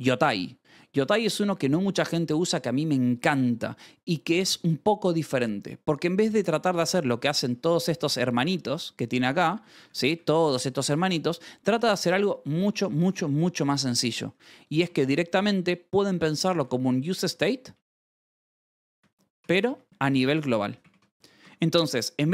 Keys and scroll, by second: 0.5 Escape, 0.8 k, 6.6 k, 7.8 Escape, 8.0 u, 9.1 shift+v, 9.4 k, 10.9 Escape, 12.0 1, 14.4 space, 14.6 shift+;, 14.8 space, 16.1-21.4 typing.